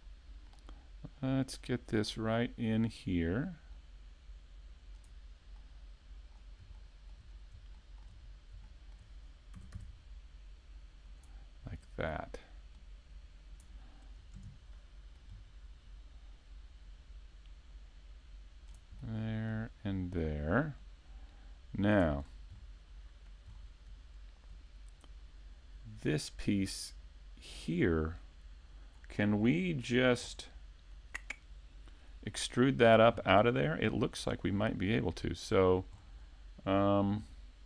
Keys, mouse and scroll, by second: 0.0-0.5 scroll up 2, 0.5 middle click, 2.9 click, 5.6 middle click, 6.8 shift+middle click, 7.7 middle click, 8.2-9.5 scroll up 3, 8.7 shift+middle click, 11.2 click, 11.8 click, 14.3 KP_Decimal, 14.7 middle click, 15.4-15.8 scroll down 2, 16.8 click, 16.8 scroll down 3, 19.0 middle click, 20.5 click, 22.2-22.6 scroll down 5, 22.6 middle click, 23.5-24.2 scroll down 1, 29.0-30.3 scroll up 2, 29.5 shift+middle click, 30.3 middle click, 33.9 scroll down 2, 34.3 right click, 34.9 middle click, 36.0-37.1 scroll down 1.